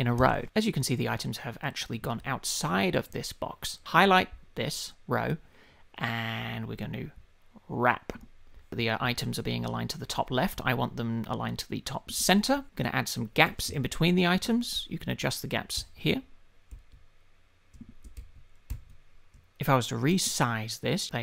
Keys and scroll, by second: 15.7 shift+Up, 16.7 shift+Up.